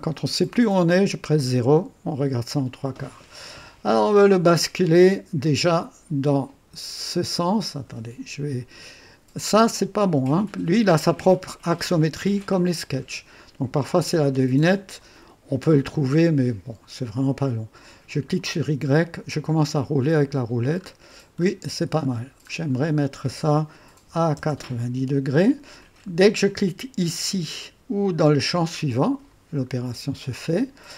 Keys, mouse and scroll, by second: 4.8-5.6 drag, 18.2 click, 19.7-20.7 scroll down 4, 20.7-22.7 scroll up 8, 23.9 KP_9, 24.3 KP_0, 28.6 click, 29.7 scroll up 1.